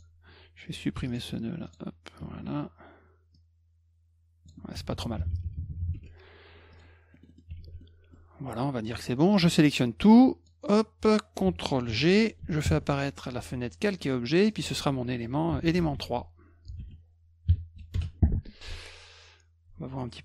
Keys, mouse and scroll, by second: 1.1 ctrl+alt+click, 1.7 click, 3.3-4.5 drag, 4.7 F2, 5.9 F1, 6.7 click, 7.1 middle click, 7.1 scroll up 2, 7.3 middle click, 7.6 s, 7.8 middle click, 9.5-10.5 drag, 11.9 ctrl+g, 12.6 ctrl+shift+l, 14.4 click, 14.5 click, 15.2-17.3 typing, 17.9 Return.